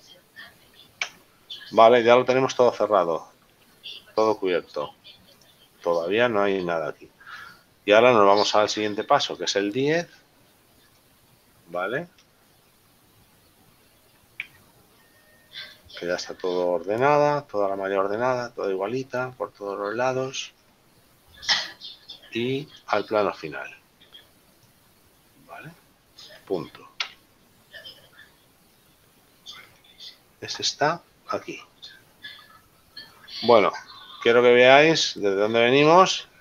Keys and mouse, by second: 1.2 Tab, 2.8 middle click, 5.5 click, 9.5 click, 10.9 click, 11.9 shift+middle click, 14.6 Tab, 14.9 middle click, 17.2 middle click, 23.0 click, 27.5 KP_Decimal, 29.9 shift+middle click, 33.3 middle click.